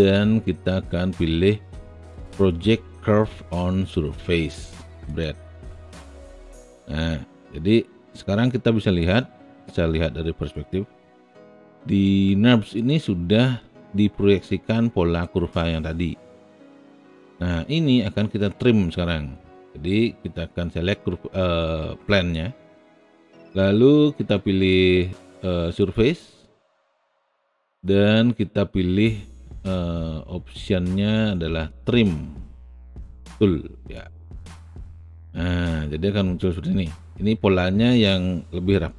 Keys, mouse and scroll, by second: 5.1 click, 8.4 space, 11.3 alt+click, 13.6 alt+middle click, 14.6 alt+right click, 14.8 alt+middle click, 14.9 alt+right click, 15.0 alt+middle click, 15.8-17.5 alt+drag, 33.9 click.